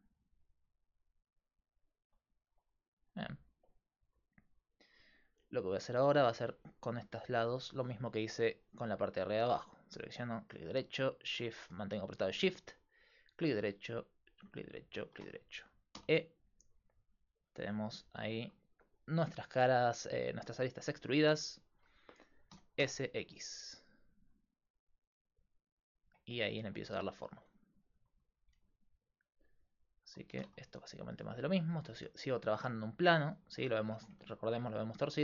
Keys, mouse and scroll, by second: 2.9-4.5 middle drag, 4.5-7.6 right drag, 5.3-7.6 drag, 16.0 e, 22.6 s, 26.4-27.8 middle drag, 27.8-31.5 right drag, 30.3 s, 32.0 middle click, 32.8 middle click, 33.0 middle click, 34.0 Tab, 34.6-35.2 scroll up 1.